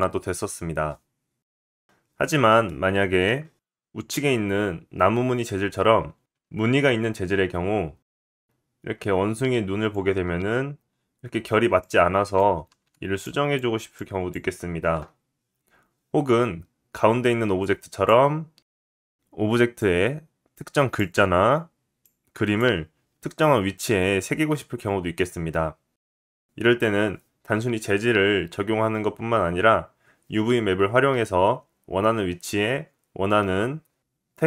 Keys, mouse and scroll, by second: 1.4 shift+middle click, 2.0 click, 8.2-17.0 drag, 12.7 ctrl+z, 17.6-34.4 drag.